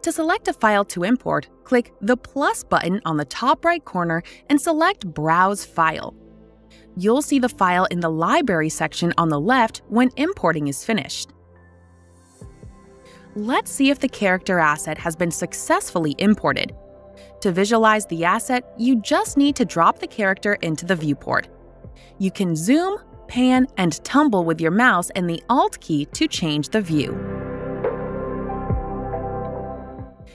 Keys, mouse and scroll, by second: 4.8 click, 6.4 click, 6.6 click, 8.7 click, 10.6 click, 15.2 right click, 16.7 click, 20.7 alt+click, 21.0-22.0 alt+scroll, 23.3-23.8 scroll, 23.8 right click, 28.6 click, 29.8-30.3 scroll.